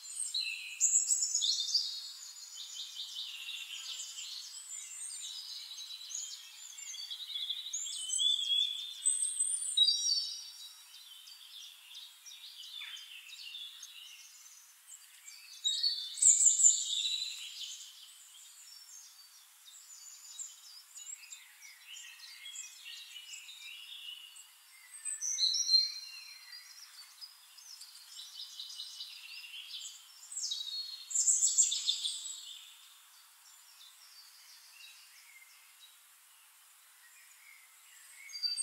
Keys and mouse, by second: 0.2 ctrl+click, 1.3 ctrl+middle click, 2.0 click, 2.2 middle click, 2.3 click, 3.3 click, 4.3 middle click, 4.4-6.0 drag, 6.2 click, 7.0 shift+click, 8.0 click, 8.8 click, 9.7 shift+-, 10.8 middle click, 11.8 middle click, 12.2 middle click, 13.8 click, 14.3 click, 14.9 click, 16.1-17.3 ctrl+drag, 18.0 drag, 18.7 shift+-, 19.7 shift+click, 20.6-21.4 ctrl+drag, 21.6 ctrl+click, 21.9-22.6 ctrl+drag, 23.1 click, 23.5-24.1 ctrl+drag, 24.4 ctrl+click, 24.8 ctrl+click, 25.8 ctrl+middle click, 26.5 middle click, 27.6 drag, 28.8 middle click, 29.8 click, 30.8 middle click, 31.6 ctrl+z, 31.6-35.7 ctrl+drag, 36.6-38.6 drag.